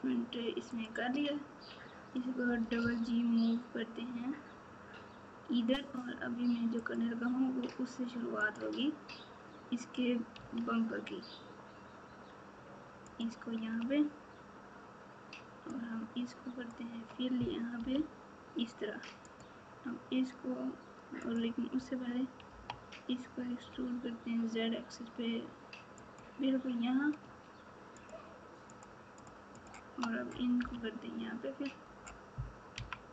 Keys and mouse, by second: 2.4 g, 10.3 e, 15.9-17.0 shift+drag, 17.7 f, 19.3 click, 21.3 click, 22.4 e, 29.1 shift+click, 30.5 f.